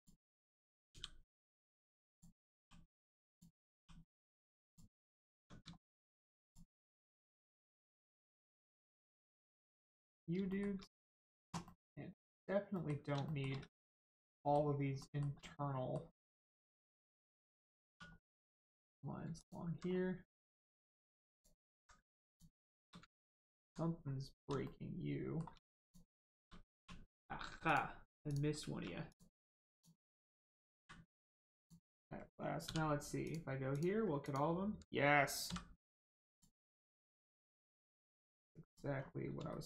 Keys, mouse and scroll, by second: 0.9 g, 1.5 right click, 2.0 click, 2.6 g, 2.9 right click, 3.3 click, 3.7 g, 4.0 right click, 4.6 click, 5.1 middle click, 5.3 Tab, 5.7 shift+middle click, 6.0 middle click, 6.1 middle click, 6.4 click, 6.6 scroll down 1, 6.8 Tab, 7.4 scroll down 1, 8.1 shift+middle click, 8.7 shift+middle click, 9.6 click, 9.9 scroll up 1, 10.4 shift+middle click, 11.6 middle click, 11.7 middle click, 12.3-12.7 scroll up 1, 12.7 middle click, 13.2 shift+scroll up 1, 13.2 shift+middle click, 13.6 middle click, 13.8 middle click, 14.4 shift+middle click, 15.4 middle click, 15.4 middle click, 16.4 click, 16.8 scroll down 1, 17.8 2, 18.8 click, 19.3 alt+click, 19.8 m, 19.9-20.8 scroll down 1, 21.3 alt+shift+click, 22.3 shift+click, 23.1 alt+middle click, 23.9 scroll up 1, 24.6 shift+middle click, 25.8 middle click, 26.7 1, 27.7 click, 28.3 shift+click, 29.1 click, 29.7 shift+click, 31.5 click, 31.6 click, 32.6 2, 33.2 click, 34.2 alt+click, 36.3 click, 36.7 scroll down 1, 37.5 middle click, 37.9 Tab, 38.6 click, 39.5 shift+middle click.